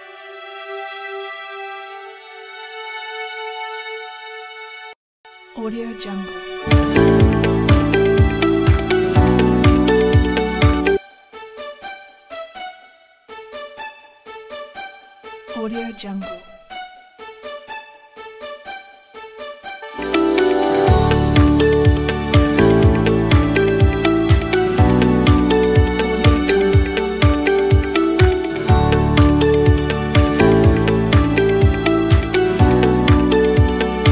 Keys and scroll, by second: 4.6 3, 6.0-6.8 typing, 10.7 s, 19.6 s.